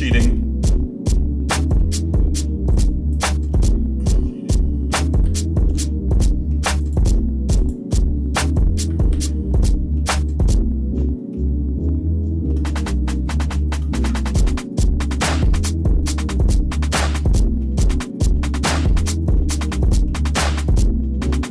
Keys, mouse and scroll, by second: 0.3 shift+middle click, 0.7 shift+scroll down 1, 1.1 shift+middle click, 2.7 click, 5.2 j, 5.8 shift+middle click, 6.8 click, 7.6 shift+click, 9.1 j, 9.6 middle click, 11.3-12.5 shift+middle drag, 12.8-13.6 scroll down 4, 13.6 shift+middle click, 13.9 Tab, 14.5-14.9 scroll up 3, 15.2-17.4 shift+middle drag, 17.6-19.1 shift+middle drag, 19.3 shift+middle click, 19.8 shift+middle click, 20.2 shift+middle click, 20.7-21.5 shift+middle drag.